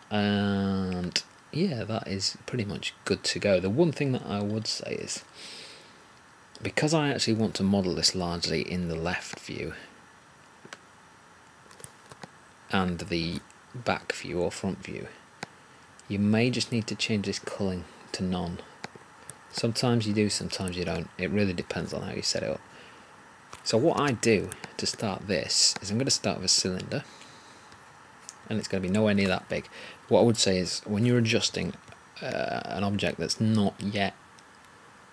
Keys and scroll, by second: 23.9 1.